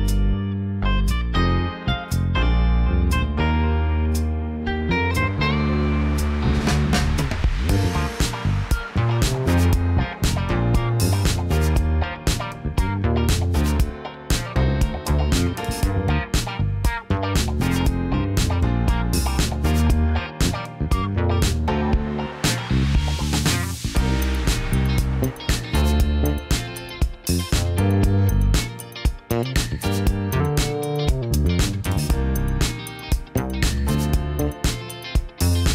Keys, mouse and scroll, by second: 1.3 x, 1.7 KP_9, 1.9 KP_0, 2.4 KP_Enter, 4.1 KP_1, 5.1 click, 6.6 click, 10.8 click, 12.2 click, 16.1 click, 18.5 click, 19.5 Tab, 22.3 alt+s, 25.8 click, 27.1 KP_1, 31.6 click, 34.1 Tab, 34.6 click.